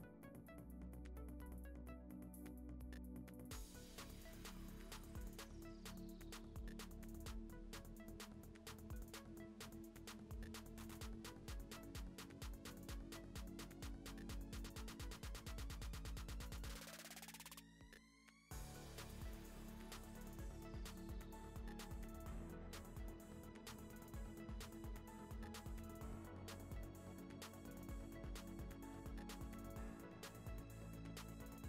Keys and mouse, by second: 0.2 click, 1.5 click, 2.1 ctrl+s, 2.8 click, 3.4 click, 4.2 click, 4.7 ctrl+s, 5.0 click, 5.4 click, 8.0 click, 8.1 shift+click, 8.4 l, 8.8 click, 10.6 click, 13.1 click, 13.6 Tab, 13.7 a, 14.0 u, 14.8 Tab, 14.9 ctrl+s, 16.0 click, 16.7 click, 22.0 click, 22.7 shift+middle drag, 23.4 click, 24.1 middle drag, 24.5 middle click, 25.4 click, 28.4-29.7 drag, 29.8-31.6 middle drag.